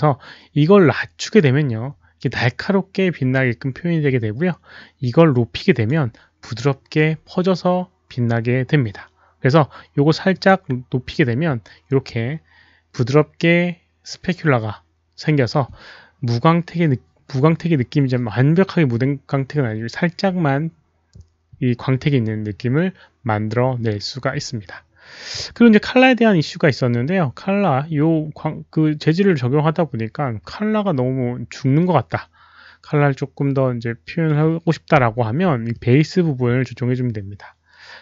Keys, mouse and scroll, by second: 0.9-1.3 drag, 5.3 click, 10.3 click.